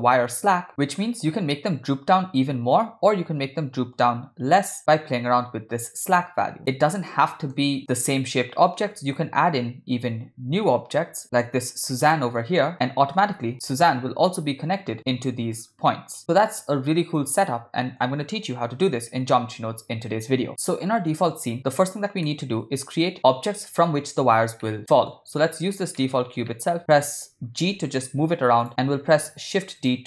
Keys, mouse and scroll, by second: 0.5 click, 1.4-7.3 drag, 7.8 middle click, 8.1 click, 9.0 shift+a, 13.2 g, 16.8-18.3 middle drag, 22.9 middle click, 25.3 middle click, 26.5 middle click, 27.2 ctrl+middle click, 28.1 g, 29.0 shift+d.